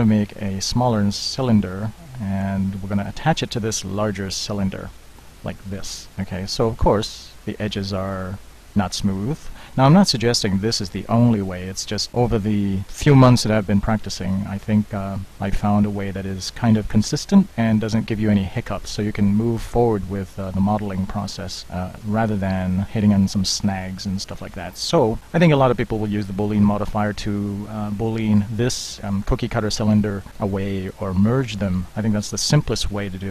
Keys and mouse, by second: 0.5 s, 2.0-2.8 drag, 4.6-5.3 middle drag, 6.1 z, 15.9-21.2 middle drag, 21.2-22.1 drag, 22.6 click, 23.5-25.2 middle drag, 25.2-28.7 drag, 28.7-30.3 middle drag, 30.3 click, 30.8-31.7 middle drag.